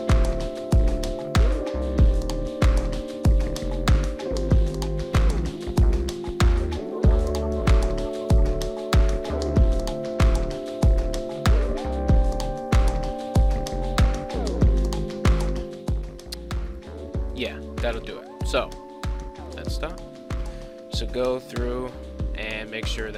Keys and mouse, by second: 0.3-1.3 drag, 1.9 click, 2.6 right click, 3.2 r, 7.4 right click, 8.6 right click, 9.6-11.8 drag, 12.4 click, 13.0 click, 13.3 r, 15.5 click, 16.7 click, 18.7 click, 19.5 click, 22.8-23.1 drag.